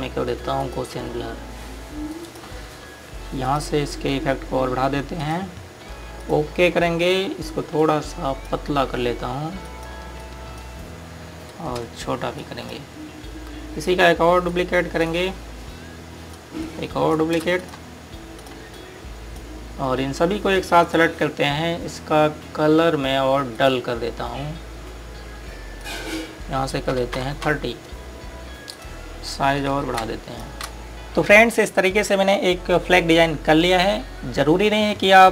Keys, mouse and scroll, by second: 1.5 click, 13.4 shift+click, 14.8 shift+click, 15.5 shift+right click, 17.3 click, 17.6 right click, 18.6 click, 19.0 scroll down 1, 19.4 click, 24.4 click, 27.9 KP_3, 28.4 KP_Enter, 29.6 click, 30.8-31.2 typing.